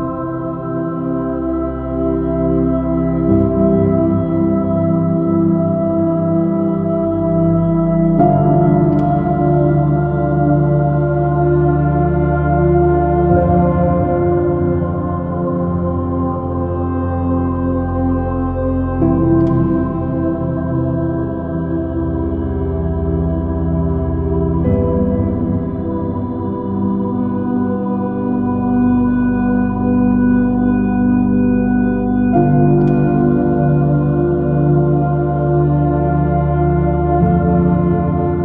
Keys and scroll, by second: 0.0 space, 0.9 space, 7.5 space, 12.7 super+z, 13.1 ctrl+alt+super+s, 14.6 j, 22.4 space, 25.9 s, 28.2 alt+super+z, 33.4 alt+super+z, 37.0 b, 37.8 alt+super+z.